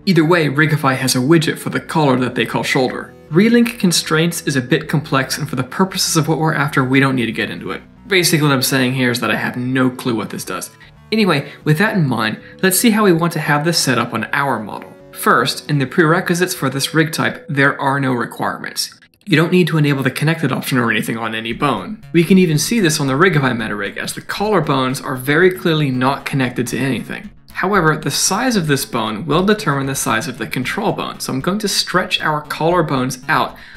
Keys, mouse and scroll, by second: 32.4 Tab, 32.4 middle click, 32.7 click, 33.1 shift+x.